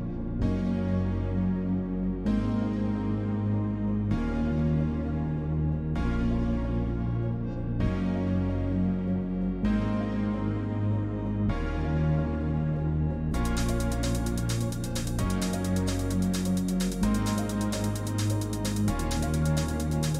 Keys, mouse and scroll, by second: 3.1 click, 4.0 click, 6.8 click, 8.4 click, 9.7 click.